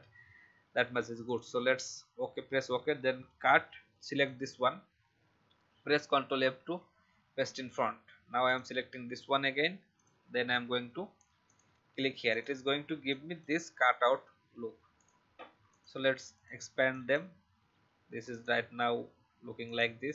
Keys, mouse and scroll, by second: 1.2 click, 3.2 ctrl+x, 4.1 click, 6.2 ctrl+f, 8.4 shift+click, 9.9 click, 11.4 alt+click, 12.2 click.